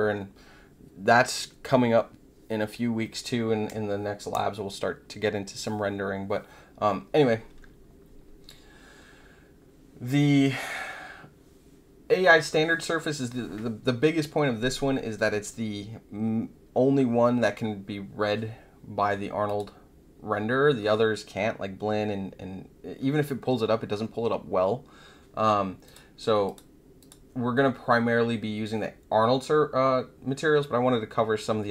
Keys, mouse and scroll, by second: 19.4 click, 25.8 click, 26.4 click, 26.9 click.